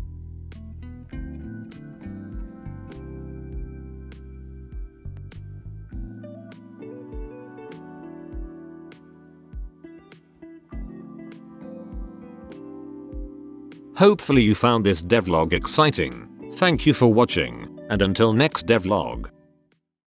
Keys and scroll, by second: 0.0-0.9 typing, 3.3-11.8 typing.